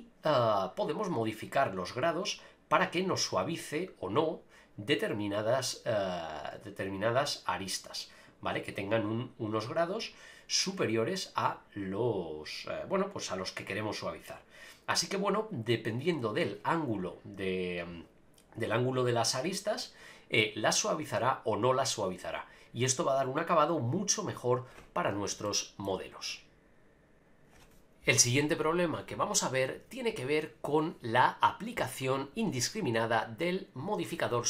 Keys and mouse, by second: 1.1-8.3 drag, 20.4 click, 22.1-23.7 drag, 25.4 shift+middle click.